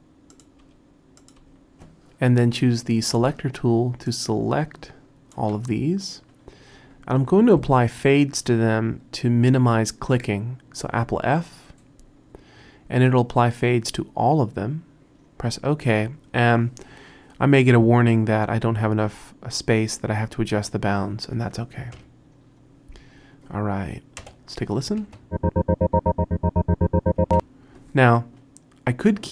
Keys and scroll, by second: 0.7 BackSpace, 1.4 BackSpace, 11.3 super+f, 22.0 Home, 24.2 Return, 25.0 space, 27.2 space.